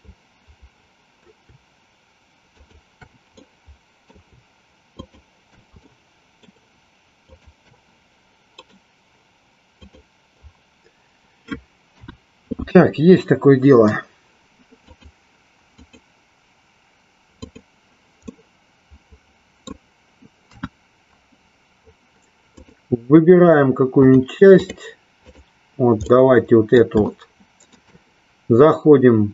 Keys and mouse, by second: 2.4 shift+click, 3.4 middle click, 6.0 shift+middle click, 7.3 shift+click, 8.7-9.9 right drag, 11.9 KP_1, 15.8 click, 17.4 click, 18.2-19.8 middle drag, 20.4 KP_1, 22.5 click, 24.0 click, 25.4 click, 26.0 middle click, 27.2 shift+middle click.